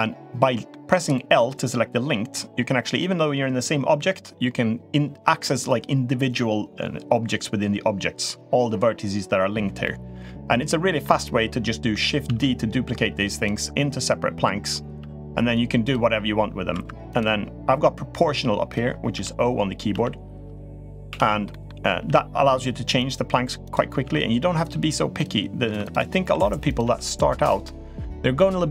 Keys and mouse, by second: 9.6-10.8 middle drag, 12.0 shift+d, 14.8 g, 16.5 2, 16.9 drag, 19.0 0, 19.5 o, 19.7 o, 21.0 o, 21.3 middle click, 21.7 g, 23.4 click, 23.8 s, 24.5 g, 25.6 3, 26.1 s, 26.6 g, 27.4-28.1 middle drag.